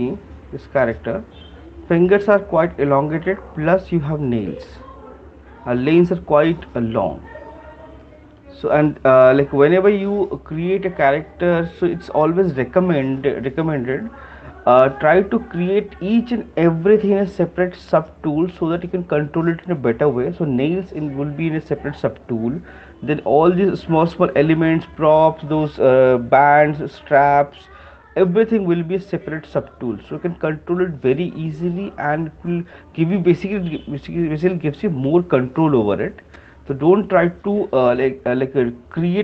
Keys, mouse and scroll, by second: 1.5 click, 5.2 click, 8.4-13.5 drag.